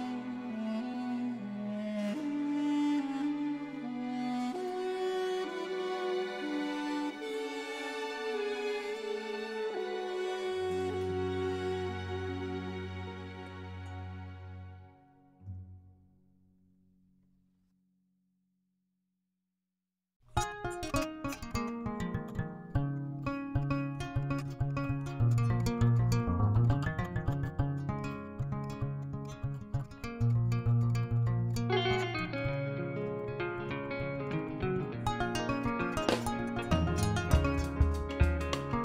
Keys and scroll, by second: 0.5 ctrl+b, 2.3 Tab, 2.8 alt+a, 7.6 Tab, 8.2-9.8 typing, 10.9 shift+z, 11.7 shift+z, 12.2 g, 12.3 z, 12.8 Tab, 26.2 ctrl+l, 27.9 alt+a, 33.1 ctrl+z.